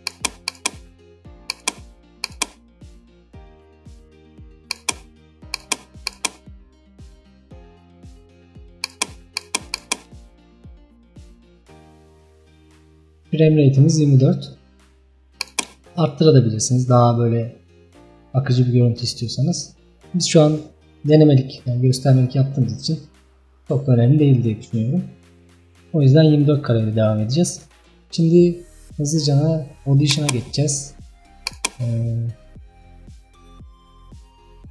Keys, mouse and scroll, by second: 6.1 click, 9.0 click, 31.5 click.